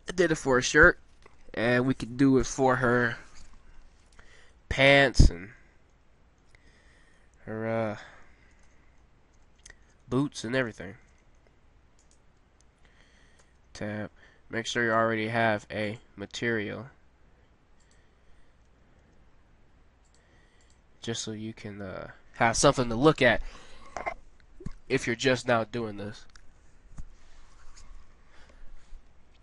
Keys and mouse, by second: 5.0-6.1 middle drag, 12.1-13.2 drag, 13.2 middle click, 13.4 Tab, 14.5-15.8 middle drag, 17.7 middle click, 18.7 a, 19.0 a.